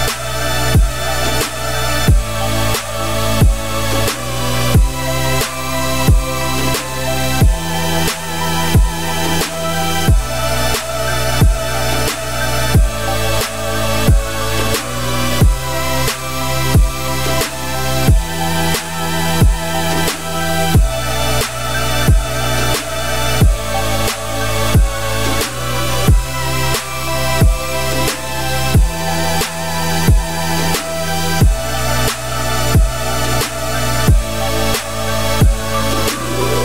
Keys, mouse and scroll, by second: 1.9-2.6 right drag, 2.6-3.0 middle drag, 3.0-3.3 scroll up 2, 3.3-4.1 middle drag, 4.1 scroll down 5, 4.3 middle drag, 4.6 `, 6.5-7.2 scroll up 4, 7.2-7.9 shift+middle drag, 7.9 Tab, 8.2 shift+middle click, 8.5 a, 9.2 s, 10.5 `, 10.9 middle click, 11.3 `, 11.8 z, 12.1-12.6 scroll down 4, 13.1 s, 14.5 Tab, 14.5 scroll down 1, 14.7-15.7 middle drag, 15.7 z, 16.2-16.5 scroll up 3, 16.5-16.9 middle drag, 16.9 g, 18.5 scroll down 2, 18.7-19.5 middle drag, 19.5 `, 20.2-20.5 middle drag, 20.5 Tab, 20.9 click, 21.3 alt+click, 21.6 middle click, 22.0 f, 22.2 z, 23.2 ctrl+z, 23.6-24.3 scroll up 1, 24.3 g, 27.8 Tab, 28.0 scroll down 1, 28.0-30.1 middle drag, 30.1-30.5 scroll down 5, 30.5-31.3 middle drag, 31.3 scroll up 2, 31.5-32.0 scroll down 4, 32.0 g, 33.0 `, 33.9-34.4 scroll down 1, 34.4 g.